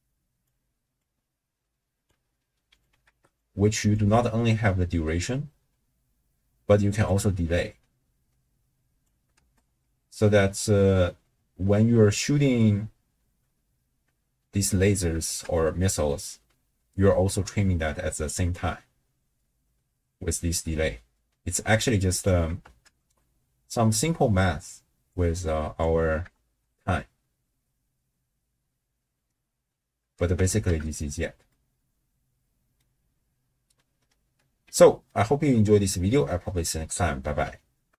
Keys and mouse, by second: 1.0 click, 1.6 click, 2.7 click, 3.1 ctrl+x, 3.4 click, 7.1-9.1 drag, 9.4 shift+space, 12.5 space, 15.3 shift+space, 15.8 space, 16.8 space, 18.5-22.3 drag, 22.6 shift+space, 24.5 space, 25.1 click, 26.3 shift+space, 30.0 space, 31.6-32.8 middle drag, 35.1 ctrl+middle click, 35.8 click, 35.8 right click.